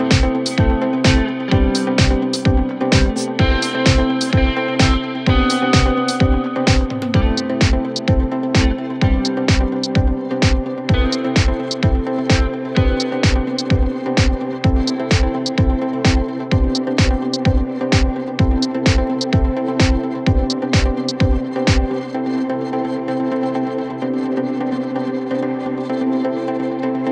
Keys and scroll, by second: 4.7 shift+F2, 5.1 Escape, 10.0-12.7 typing.